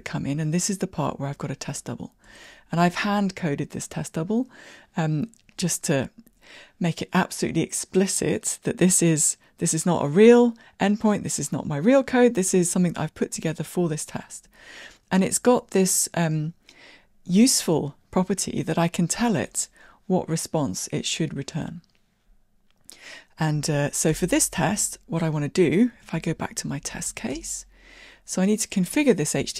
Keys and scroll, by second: 2.5 super+b, 23.7 super+e, 26.2 super+e.